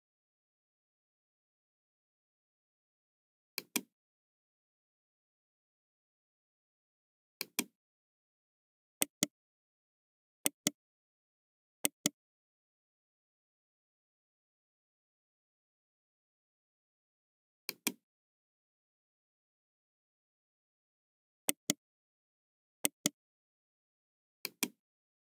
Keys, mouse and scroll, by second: 3.5 click, 6.6 Return, 6.6 KP_6, 7.3 click, 8.9 right click, 10.4 right click, 11.7 right click, 15.2-16.5 middle drag, 16.6 KP_2, 17.6 click, 18.5-19.2 scroll down 2, 19.4-21.1 middle drag, 21.4 right click, 22.8 right click, 24.4 click.